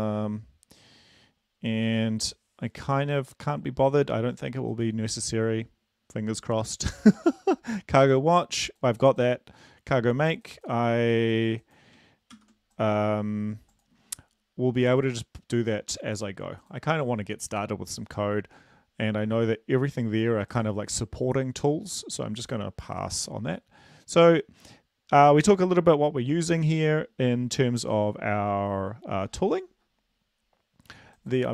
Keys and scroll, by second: 13.2 ctrl+c.